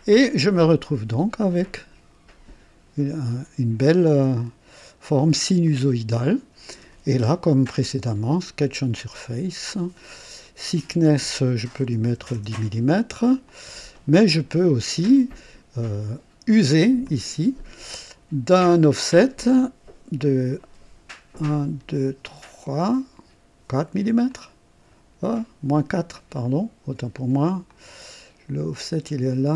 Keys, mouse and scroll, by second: 0.1-3.4 drag, 4.0-5.5 drag, 5.6-7.0 drag, 8.6 click, 10.4 click, 12.1 KP_1, 12.3 KP_0, 13.4 click, 14.1-15.4 drag, 17.0 click, 18.5 click, 21.4 scroll up 1, 22.3 scroll up 1, 23.6 scroll up 1, 24.3 click, 26.1 click, 26.4 typing, 27.7 click.